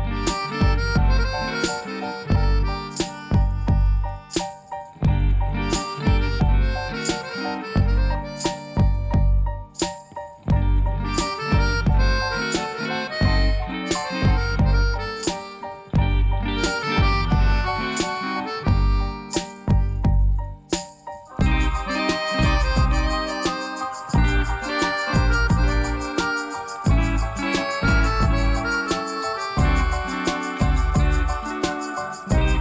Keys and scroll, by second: 0.3 Tab, 0.4 g, 0.5 z, 1.1 Tab, 2.2-3.3 typing, 4.7 Tab, 5.0 g, 5.0 z, 6.0 Tab, 6.6 x, 10.4 ., 11.1 ., 14.1 Tab, 15.7 Tab, 18.2 a, 18.5 u, 22.1 ctrl+r, 23.4 ctrl+b, 24.8 i, 26.8 ctrl++, 27.3 Tab, 32.0 shift+a.